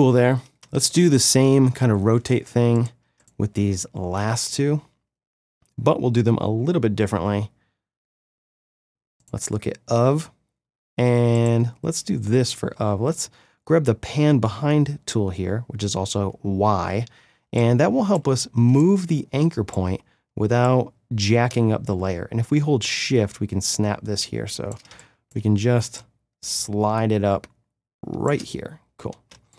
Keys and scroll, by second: 17.4 space, 24.9 space, 29.3 space.